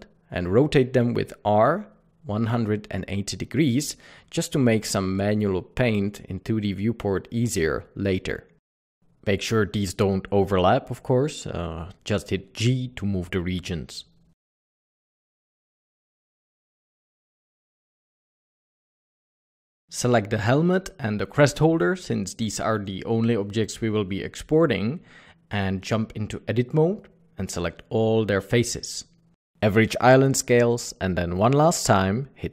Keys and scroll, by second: 0.6 ctrl+l, 1.5-2.0 typing, 12.4 r, 18.9 g, 19.0 Tab, 19.4 alt+a, 21.2 alt+a, 22.1 Tab, 27.3 a.